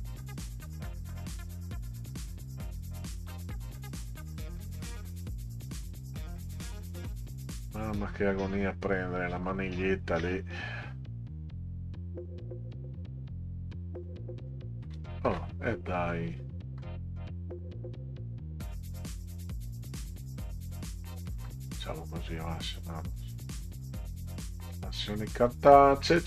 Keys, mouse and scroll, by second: 9.7-10.1 ctrl+scroll up 4, 16.1 middle click, 17.3 click, 19.7 click, 20.7-23.1 drag, 24.5 ctrl+scroll down 2.